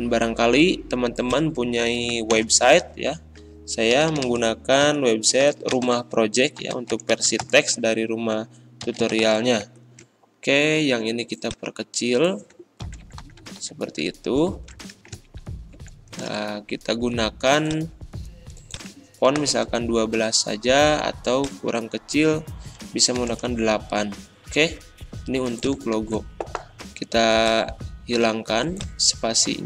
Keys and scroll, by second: 2.3 shift+Return, 3.9 w, 5.1-9.8 typing, 12.8 ctrl+[, 15.3 ctrl+shift+Right, 19.0-19.8 typing, 23.2 8, 23.3 Return, 25.9 ctrl+a.